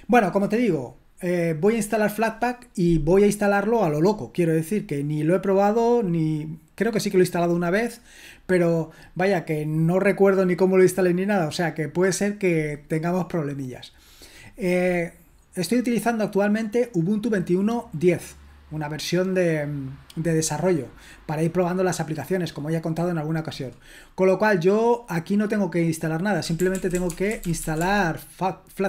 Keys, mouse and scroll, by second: 14.3-26.4 drag, 26.2-28.8 typing.